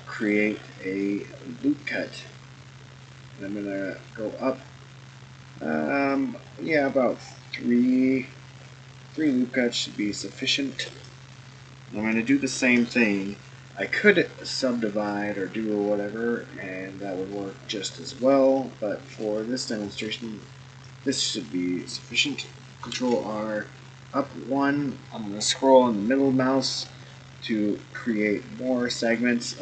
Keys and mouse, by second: 12.5 ctrl+r, 22.9 ctrl+r.